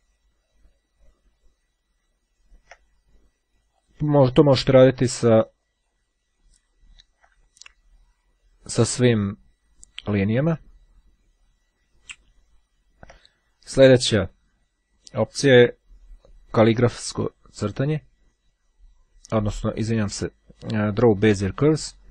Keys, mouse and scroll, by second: 0.2-1.2 ctrl+scroll down 1, 1.5-2.6 ctrl+scroll down 4, 3.9 click, 4.9-6.5 scroll down 3, 6.5-7.6 ctrl+scroll down 1, 7.6-8.9 ctrl+scroll up 1, 9.0-9.6 scroll down 1, 10.1-11.1 scroll down 1, 11.2-11.8 scroll down 1, 11.8 scroll down 1, 20.5-22.1 drag.